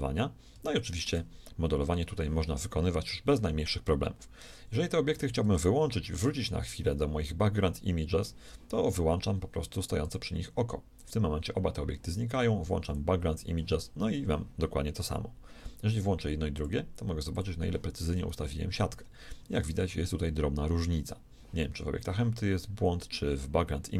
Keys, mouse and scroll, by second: 1.7-8.0 middle drag, 10.0-14.8 drag, 16.5-19.1 drag.